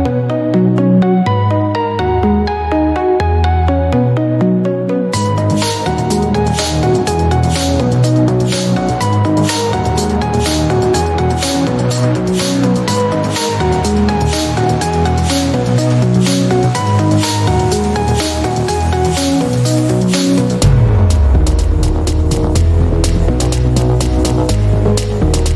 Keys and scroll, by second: 5.1 BackSpace, 5.7 3, 6.1 Return, 10.2 BackSpace, 10.5 1, 10.7 Return, 18.2 BackSpace, 18.4 2, 18.5 Return.